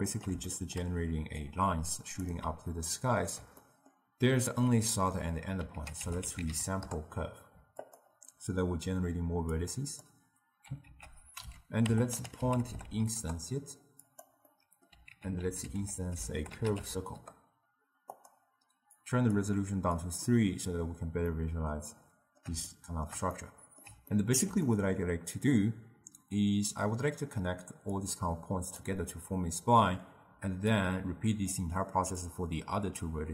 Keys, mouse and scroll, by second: 1.5-2.8 drag, 2.8-5.8 ctrl+middle drag, 5.8 ctrl+a, 9.6-10.9 drag, 10.9 ctrl+a, 14.6 middle click, 15.2 ctrl+a, 19.0-21.3 drag, 21.3-26.9 middle drag, 26.9-28.1 d, 28.1-28.8 drag, 28.8-29.2 d, 30.3 d, 30.8-31.6 drag, 31.6-32.0 d, 32.3-33.3 drag.